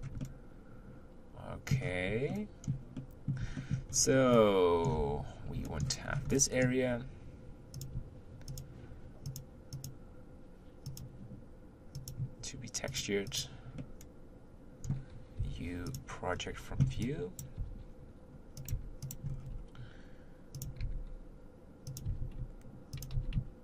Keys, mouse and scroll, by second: 0.2-1.8 middle drag, 1.8-2.3 scroll up 1, 2.3-3.9 shift+middle drag, 3.9-4.3 scroll up 3, 4.3-5.0 middle drag, 5.0 Tab, 5.7 shift+middle click, 6.0-6.3 scroll up 3, 6.3-7.8 middle drag, 7.8 click, 8.5 shift+click, 9.2 shift+click, 9.8 shift+click, 10.8 shift+click, 12.0 shift+click, 12.9 shift+click, 13.3 shift+click, 13.8-15.4 middle drag, 15.4 u, 16.3-16.8 scroll down 1, 16.8 b, 18.8 g, 19.3 scroll up 3, 19.5 r, 20.9 g, 22.0 r, 23.1 g.